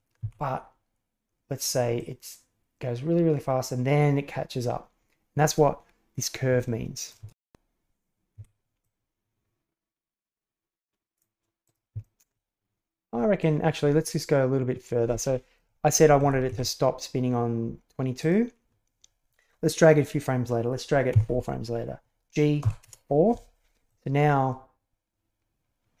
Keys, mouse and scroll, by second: 0.1 r, 1.9-7.1 drag, 7.2 shift+space, 8.3 Escape, 8.8-11.1 drag, 11.5 click, 12.0 shift+middle click, 13.4-15.6 drag, 15.9 Right, 16.2 Right, 16.5 Left, 18.1 click, 21.0 g, 23.8-26.0 drag.